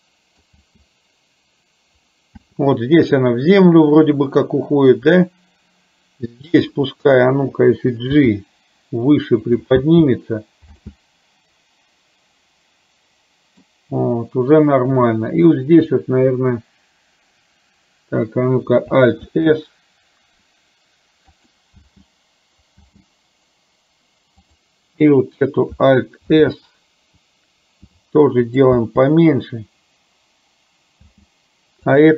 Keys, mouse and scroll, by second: 0.8 space, 2.4 space, 3.8 middle click, 6.4 click, 8.2 g, 9.9 space, 10.8 space, 10.9-12.7 middle drag, 12.7-13.8 drag, 19.3 alt+s, 21.8 space, 22.9 space, 26.4 alt+s, 28.7 space, 31.1 space.